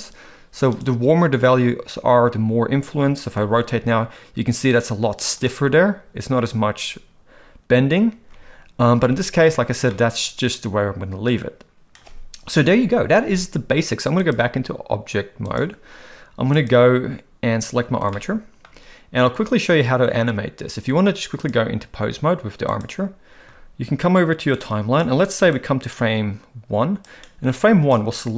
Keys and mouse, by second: 3.4 r, 8.2 ctrl+z, 9.0 ctrl+z, 9.9-11.2 middle drag, 12.5 KP_1, 14.2-15.6 drag, 16.5 click, 18.1-18.6 shift+middle drag, 21.5-22.8 drag, 24.6 click, 25.5-27.1 drag, 28.1-28.3 drag.